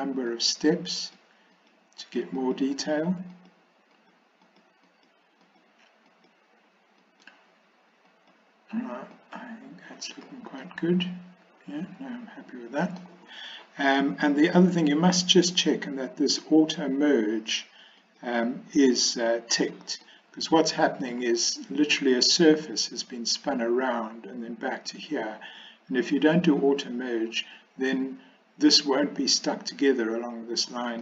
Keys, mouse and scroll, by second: 0.3 click, 1.0 click, 1.6 click, 2.0 click, 2.4 click, 2.8 click, 3.4 click, 4.0 click, 4.5 click, 4.9 click, 5.5 click, 6.1 click, 7.0 click, 8.1 click, 9.2 click, 10.7-13.1 middle drag, 10.7 scroll up 1, 13.0 scroll down 1, 16.3 click, 18.1 click, 20.1 scroll up 1, 20.2 middle click, 21.2-21.5 scroll down 1.